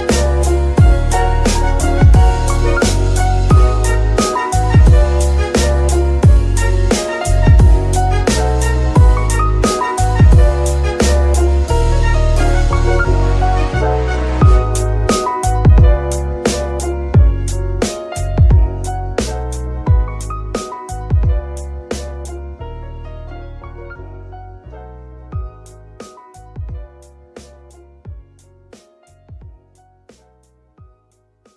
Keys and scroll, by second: 1.0 Escape, 2.2 Insert, 2.3 Delete, 2.8 Page_Up, 3.1 Return, 4.7 Num_Lock, 5.0 KP_0, 5.1 KP_Decimal, 5.4 KP_9, 5.6 Return, 6.5 r, 6.7 r, 9.4 Escape, 10.0 d, 13.4 shift+r, 13.6 x, 15.2 Escape, 20.7 r, 20.9 x, 23.2 Escape, 23.7 r, 24.0 x, 29.0 Escape, 29.6-30.6 typing.